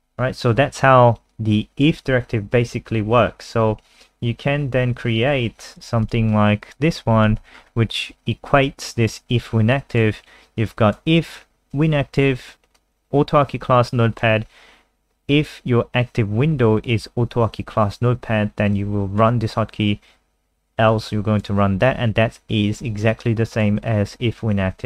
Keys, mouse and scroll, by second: 1.6 click, 3.3-4.2 scroll down 1, 5.1 click, 5.9 ctrl+c, 6.0 click, 6.3 click, 7.4 ctrl+v, 7.5 scroll up 4, 8.6 click.